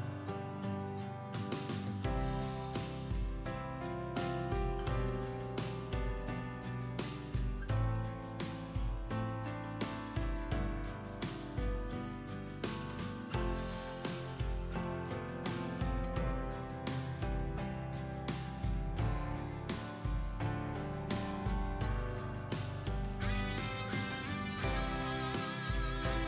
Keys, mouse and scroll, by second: 1.6 click, 2.5 shift+click, 3.7-5.8 drag, 6.4 click, 7.1 ctrl+r, 7.4 ctrl+r, 7.7 typing, 8.1-8.5 scroll down 1, 8.5 scroll up 1, 9.2 click, 11.8 click, 13.3 click, 14.5-14.8 scroll down 1, 15.1 click, 18.1 click, 19.5-26.2 drag.